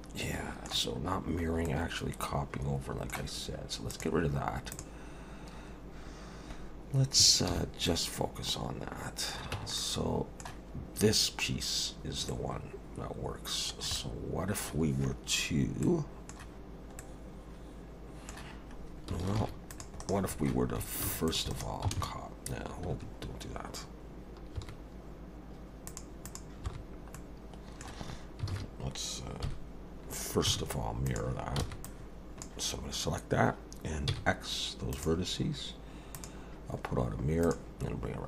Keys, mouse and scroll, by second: 1.1 scroll up 2, 1.7 middle click, 3.9 click, 4.7 click, 7.5 shift+h, 7.9 middle click, 9.5 Tab, 9.8 middle click, 12.3 middle click, 14.0 middle click, 15.8 middle click, 17.0 middle click, 19.4 ctrl+r, 21.1 ctrl+r, 26.6 n, 27.1 middle click, 28.5 alt+a, 29.4 KP_1, 30.5 z, 31.6 b, 34.1 x, 36.1 click.